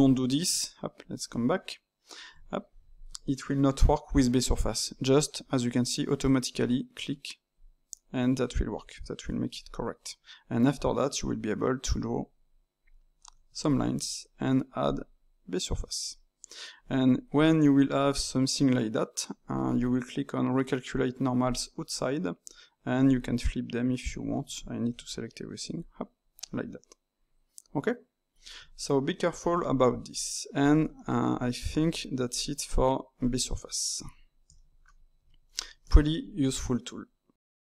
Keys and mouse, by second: 0.4 Tab, 1.2 click, 2.3 Tab, 7.5-9.7 drag, 9.7-11.2 middle drag, 11.2 d, 11.8 click, 12.2 d, 12.8 click, 13.2 d, 13.6 alt+click, 14.8-15.8 drag, 15.8-17.3 middle drag, 17.3 click, 17.9-20.9 middle drag, 21.4-24.4 drag, 24.4 a, 24.9 a, 25.8 click, 26.3-28.5 middle drag, 28.5 Tab, 29.5 x, 30.1 click, 30.7 ctrl+middle click, 31.2 Tab, 31.7 alt+click, 32.3 alt+shift+click, 32.6 alt+shift+click, 33.9 x, 34.5 ctrl+middle click, 35.1 Tab, 35.5-37.7 shift+middle drag.